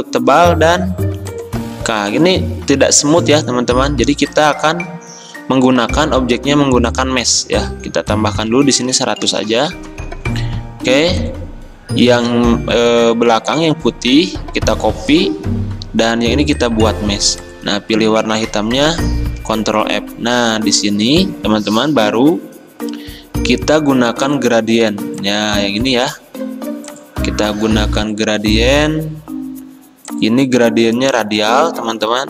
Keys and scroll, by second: 9.1-9.4 typing, 9.7 Return, 13.8 ctrl+c, 19.4 ctrl+f, 31.6 g.